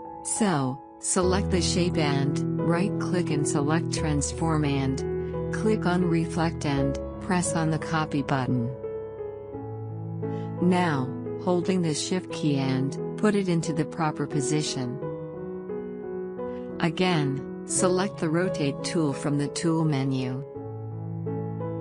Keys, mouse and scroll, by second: 1.8 click, 2.4 right click, 4.2 click, 9.3-15.2 drag.